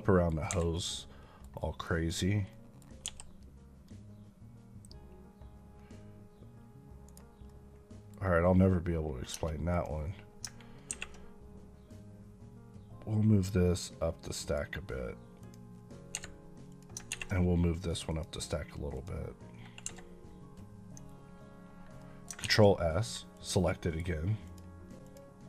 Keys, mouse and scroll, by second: 0.4 Escape, 0.6 middle click, 1.3 KP_Decimal, 1.5 middle click, 2.0 click, 2.4 middle click, 2.9 g, 7.0 right click, 7.3 middle click, 9.2 Tab, 9.6 click, 14.3 click, 16.0 Escape, 16.6 click, 18.0 click, 19.7 Escape, 21.6 scroll down 1, 22.3 s, 22.9-23.2 scroll up 1, 23.2 click, 23.6 middle click, 24.3 click.